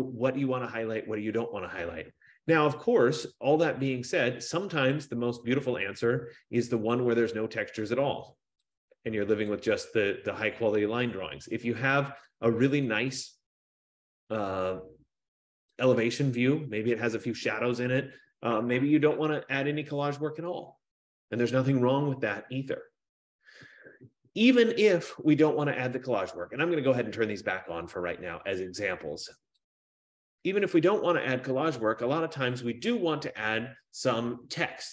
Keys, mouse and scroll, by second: 7.0 click, 8.9 click, 9.7 click, 13.1 click, 16.2 click, 17.5 F15, 25.7 click, 26.0 click, 27.3 click, 28.1 click, 29.9 click, 33.8 click.